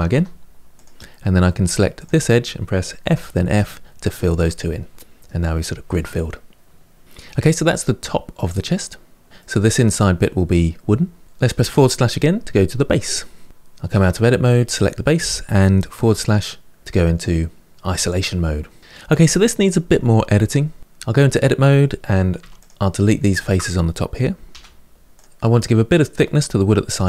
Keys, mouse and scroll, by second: 1.7 click, 2.8 f, 3.2 f, 4.2-7.1 middle drag, 8.6-9.2 scroll down 2, 9.2-11.4 middle drag, 11.5 KP_Divide, 13.7 Tab, 14.5 click, 15.8 KP_Divide, 20.9 Tab, 22.1 3, 22.3 click, 23.1 shift+click, 24.3 Delete.